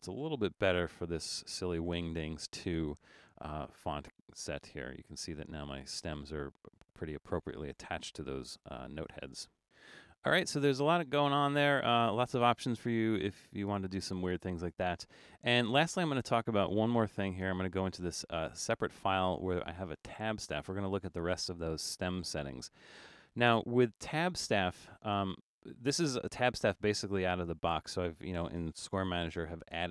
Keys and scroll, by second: 0.8 super+=, 1.4 super+=, 8.6 super+-, 8.8 super+-.